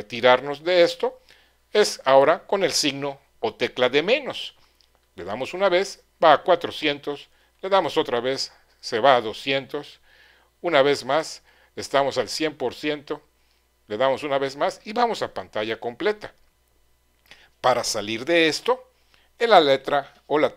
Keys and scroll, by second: 5.0 -, 7.5 -, 10.1 -, 13.9 -.